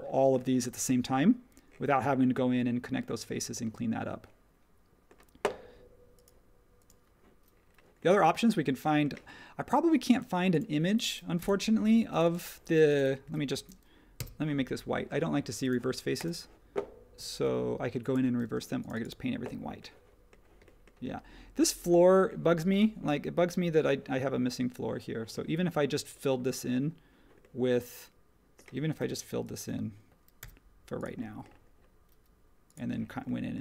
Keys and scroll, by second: 18.4 space.